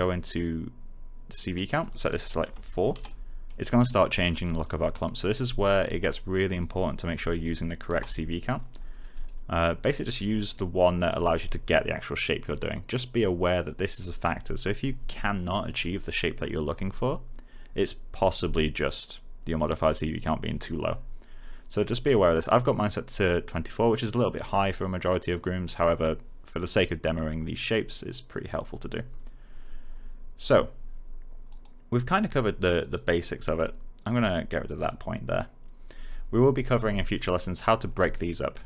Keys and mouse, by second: 2.4 4, 2.8 Return, 4.3 alt+right click, 5.0 alt+click, 7.1 typing, 7.8 Return, 8.9 alt+middle click, 9.8 alt+right click, 10.4 alt+middle click, 11.1 alt+right click, 13.5 click, 22.3 click, 31.4 click, 34.6 click, 38.1 middle click.